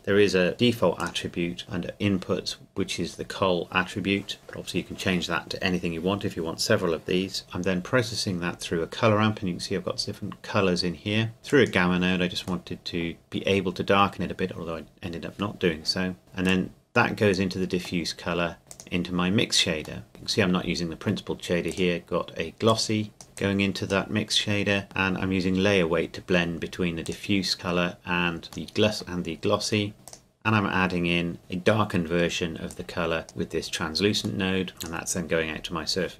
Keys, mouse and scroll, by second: 1.0 click, 7.4 click, 11.5 click, 12.7 middle click, 16.2 scroll down 1, 16.5 click, 18.1 middle click, 18.7 click, 20.0 middle click, 21.7 click, 23.2 scroll up 1, 23.4 click, 27.0 click, 28.7 middle click, 30.1 click, 34.4 middle click, 34.7 click.